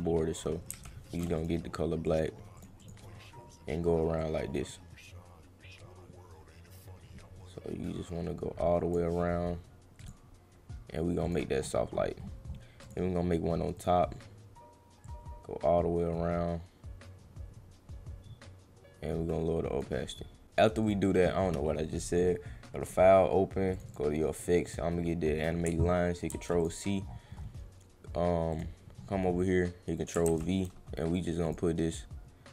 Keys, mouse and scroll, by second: 1.4 click, 2.0 click, 2.5 click, 2.8 click, 4.2-8.9 drag, 10.0 click, 11.3 click, 11.5 middle drag, 12.8 click, 13.7 click, 15.0-19.8 drag, 20.8 click, 21.6 middle click, 22.8 click, 23.7 click, 23.9 click, 24.7 click, 26.3 ctrl+c, 27.2 middle click, 28.5 click, 29.0 middle click, 29.3 middle click, 30.2 ctrl+v, 31.5 click.